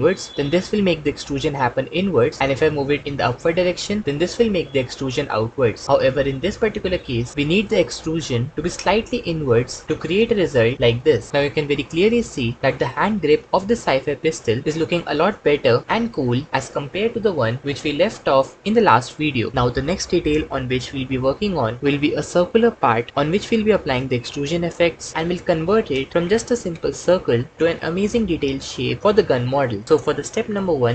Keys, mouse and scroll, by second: 10.8 middle click, 11.3 Tab.